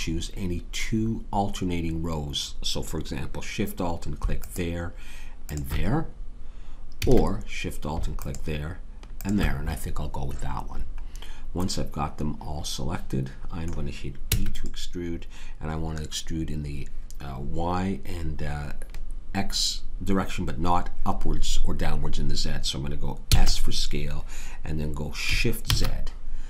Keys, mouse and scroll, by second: 5.5-6.9 drag, 6.9 a, 10.5 click, 14.3 e, 23.3 s.